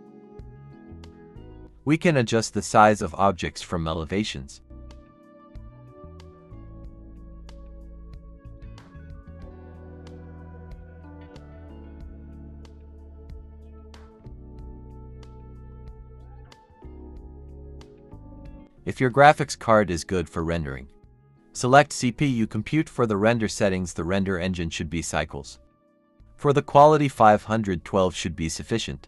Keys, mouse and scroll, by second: 2.3 shift+b, 2.4 d, 6.6 double click, 6.9 typing, 7.6 Escape, 8.0 typing, 10.4 Tab, 10.7-11.4 typing, 12.0-13.0 scroll up 1, 13.0-16.6 typing, 13.9 scroll down 1, 16.1 scroll down 1, 19.1 typing, 25.6-28.9 typing.